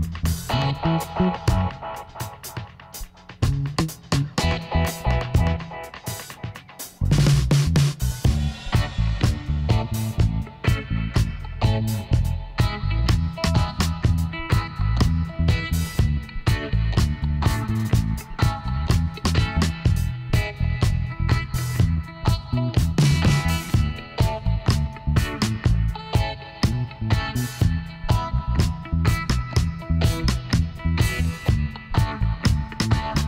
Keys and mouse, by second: 1.9 middle click, 2.4-4.0 right drag, 3.4 click, 4.0-5.4 middle drag, 4.8 KP_1, 6.1 shift+d, 9.2 r, 11.5-13.1 drag, 13.1-17.3 middle drag, 18.5 s, 21.6-23.1 middle drag, 23.1-24.9 drag, 24.5 right click, 25.0-27.1 middle drag, 26.3 KP_1, 27.4 middle click, 29.0 e.